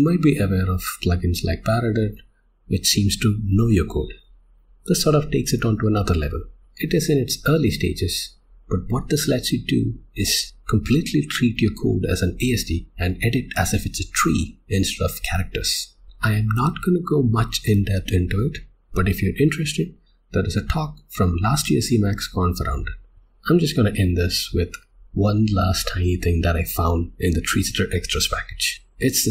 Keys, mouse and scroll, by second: 23.1 click.